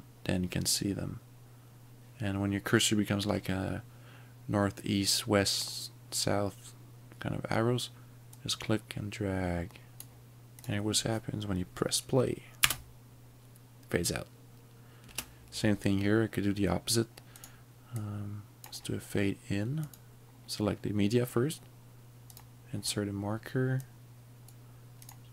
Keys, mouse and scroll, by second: 8.5 click, 10.6 click, 12.6 space, 15.1 space, 17.4 click, 18.1 click, 19.9 click, 22.4 click, 24.0 click, 25.1 click.